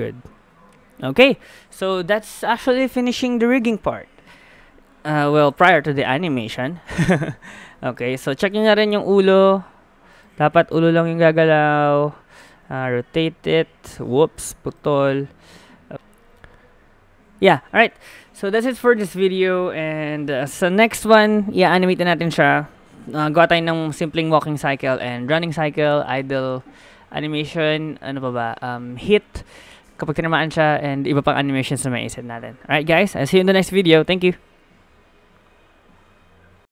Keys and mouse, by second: 9.3 r, 10.5 KP_1, 11.2 r, 12.8 r, 14.9 ctrl+z, 15.1 ctrl+z, 15.9 middle click, 15.9 a, 17.6 middle click.